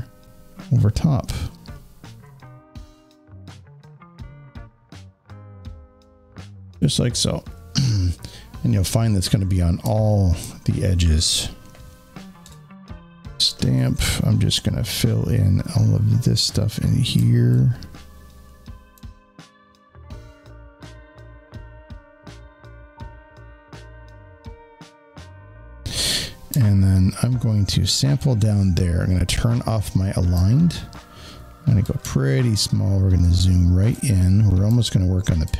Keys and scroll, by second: 12.3 alt+s, 31.9 alt+z.